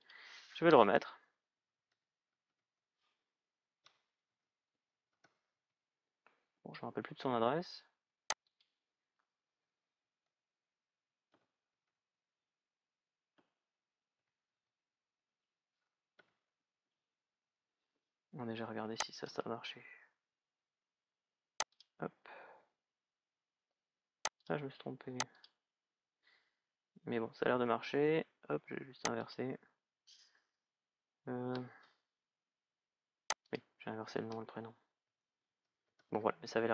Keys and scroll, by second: 1.0-2.8 typing, 3.5 Tab, 4.0 shift+d, 5.3 Tab, 9.8 shift+", 11.0 shift+è, 13.9 Tab, 14.3 shift+b, 16.0 shift+l, 16.7 Tab, 34.8 shift+d, 36.1 Tab.